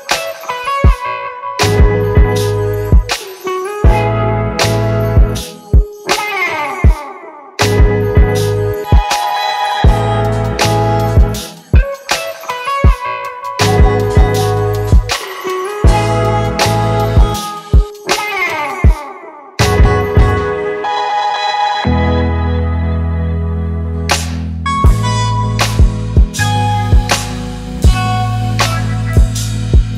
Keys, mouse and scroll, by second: 2.7 ctrl+t, 4.1 ctrl+click, 7.3 ctrl+click, 8.9 ctrl+click, 11.7 Return, 15.8 double click, 17.3 ctrl+z, 21.7 ctrl+=, 21.8 ctrl+=, 22.2 scroll down 1, 23.3-23.8 typing, 25.8 typing, 28.4 ctrl+t, 29.6 ctrl+click.